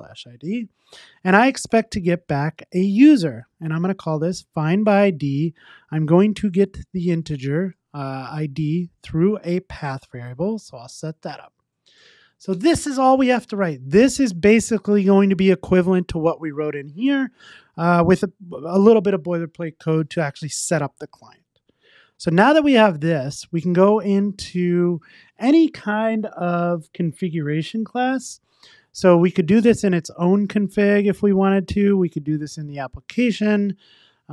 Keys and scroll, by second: 2.6 Return, 3.7 Tab, 9.9 Return, 14.7 super+s, 22.1 super+s.